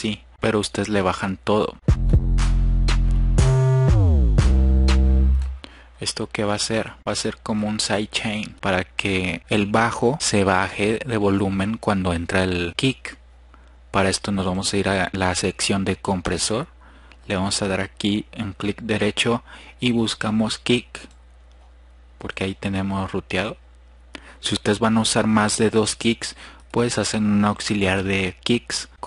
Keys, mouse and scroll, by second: 2.5 F1, 3.7 click, 13.7-16.6 drag, 16.9-17.5 scroll up 2, 17.9 click, 21.9 F1, 21.9 click, 22.5 drag, 22.9 click.